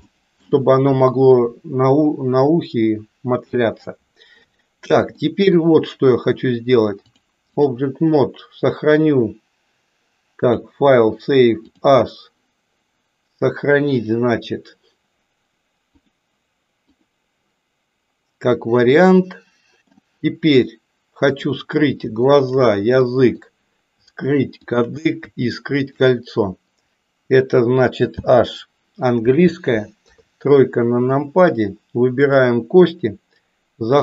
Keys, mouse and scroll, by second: 0.2 shift+middle click, 5.2 shift+middle click, 7.2 click, 10.4-12.1 drag, 19.1 middle click, 21.2 click, 23.1 middle click, 25.7 shift+click, 28.1 h, 29.9 KP_3, 32.3 click.